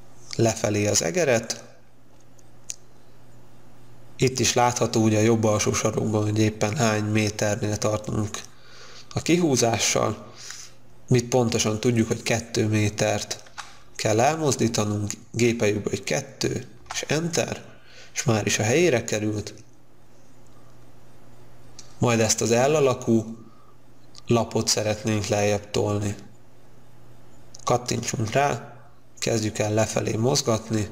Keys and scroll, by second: 13.7 2, 16.9 Return.